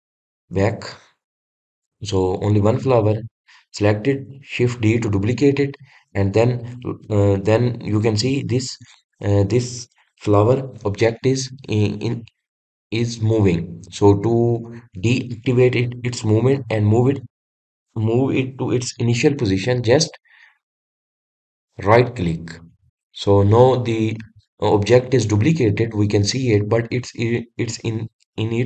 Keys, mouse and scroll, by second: 0.2 ctrl+z, 0.6 ctrl+z, 3.8 click, 4.3 drag, 5.6 shift+d.